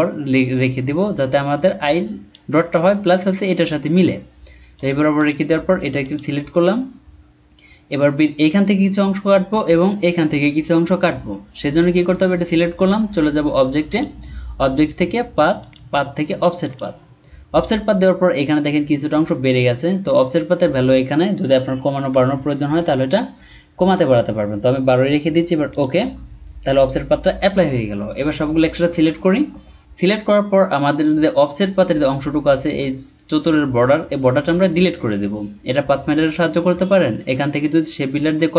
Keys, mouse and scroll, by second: 22.1 Down, 22.3 Down, 22.7 Up, 22.8 Up.